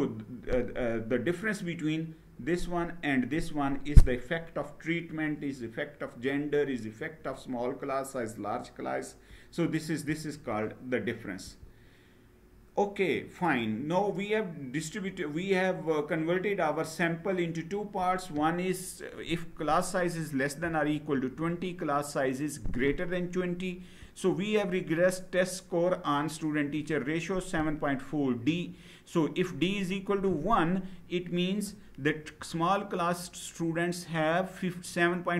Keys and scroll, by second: 11.2 Right.